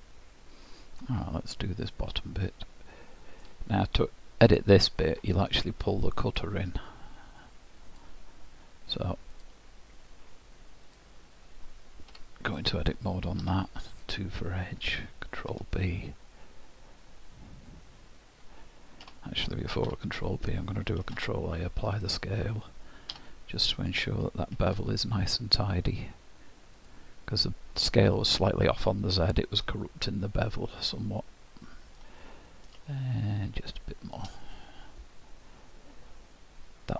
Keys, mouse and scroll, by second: 6.3 click, 7.9 click, 9.3 click, 10.9 click, 12.1 Tab, 13.4 2, 14.3 click, 15.4 ctrl+b, 19.9 Tab, 21.0 ctrl+a, 23.1 Tab, 24.6 ctrl+b, 28.6 middle click, 32.9 shift+click.